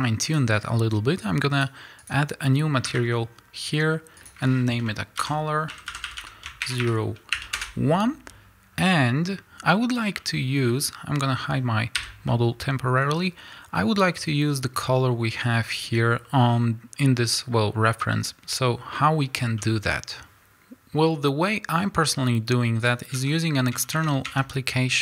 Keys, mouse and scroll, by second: 1.7 click, 2.6-8.9 drag, 7.6 Return, 8.7 scroll down 1, 8.9-25.0 middle drag, 12.0 h, 13.0-14.0 scroll up 2, 15.6-16.5 scroll down 2, 17.6-19.2 scroll down 2, 19.2-19.6 scroll down 1.